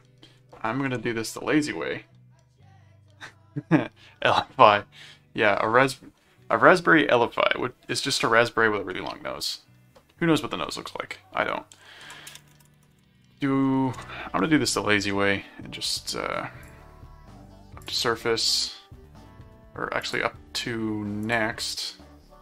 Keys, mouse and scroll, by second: 0.9 s, 11.7-13.7 typing, 13.9 Return, 16.6 click, 17.8 click, 20.0 click, 21.2 click.